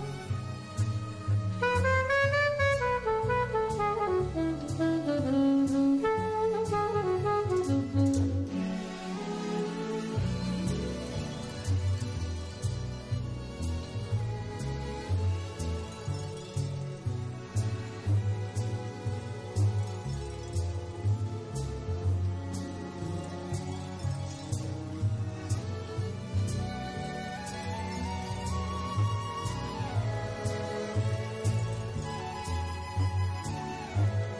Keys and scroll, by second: 0.4 super+space, 10.2 super+z, 10.2 super+space, 11.1 super+y, 12.1 super+y, 12.2 alt+super+space, 15.0 super+space, 16.5 super+space, 26.3 super+z, 26.3 super+space, 27.3 super+y, 28.2 super+y, 28.3 alt+super+space, 31.1 super+space.